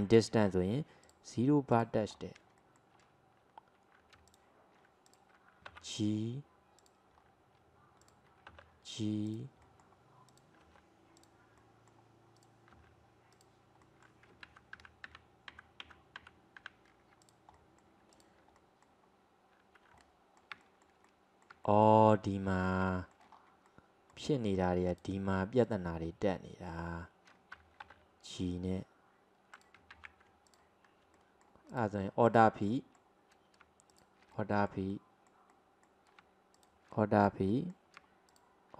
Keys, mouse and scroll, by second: 1.1 click, 1.7 click, 2.2 scroll up 2, 2.7-4.3 shift+middle drag, 4.3 alt+click, 5.1 click, 5.7 g, 7.2-8.1 scroll up 1, 8.1 click, 8.5 g, 9.7 middle click, 10.3 click, 10.7 g, 11.7-12.4 middle drag, 12.4 click, 12.8 g, 13.9-14.5 middle drag, 14.5 ctrl+z, 14.9 ctrl+z, 15.1 ctrl+z, 15.7 ctrl+z, 15.9 ctrl+z, 16.3 ctrl+z, 16.7 ctrl+z, 17.3 drag, 17.6 middle click, 18.2 click, 18.6-23.4 middle drag, 23.4-23.7 scroll up 2, 23.7-24.9 middle drag, 24.9 click, 25.7 click, 28.1 g, 30.1 ctrl+z, 30.5 alt+click, 31.2 middle click, 31.7 click, 32.3 alt+click, 32.7-33.9 middle drag, 33.9 alt+shift+click, 34.4-36.6 middle drag, 36.6 alt+shift+click, 37.0-38.3 middle drag, 38.3 alt+shift+click.